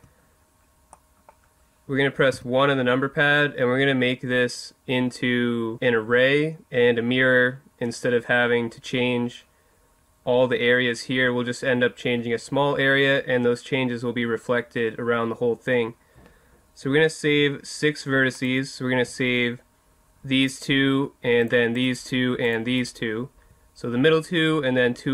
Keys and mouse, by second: 2.4 KP_1, 18.3 right click, 20.4-24.5 right drag.